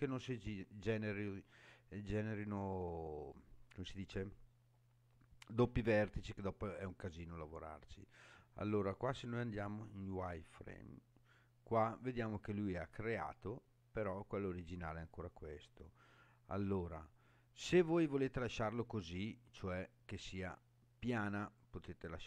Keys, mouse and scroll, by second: 6.8-8.1 scroll up 5, 8.1-9.2 scroll up 1, 9.2 click, 10.4 scroll up 2, 12.3-12.9 scroll up 1, 16.6 scroll down 2, 17.4-18.3 scroll down 3, 19.1-19.7 scroll down 3, 19.9-22.2 middle drag.